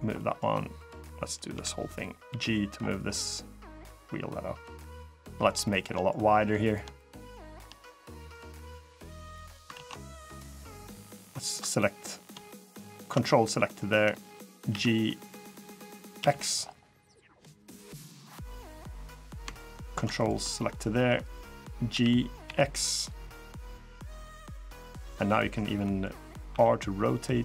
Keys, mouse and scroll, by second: 0.5 click, 1.3 KP_3, 2.0 g, 4.9 middle click, 5.4 shift+middle click, 5.7 middle click, 5.9 scroll up 1, 6.4 click, 7.0 shift+click, 7.8 click, 9.5 ctrl+z, 9.7 middle click, 9.9 scroll up 2, 10.7 click, 11.0 scroll up 1, 11.0 middle click, 11.3 scroll down 1, 12.3 ctrl+shift+click, 13.0 middle click, 14.4 g, 18.1-18.7 scroll down 1, 19.0 click, 19.9 ctrl+click, 20.3 middle click, 21.7 g, 24.3 middle click, 25.5 middle click, 26.2 r.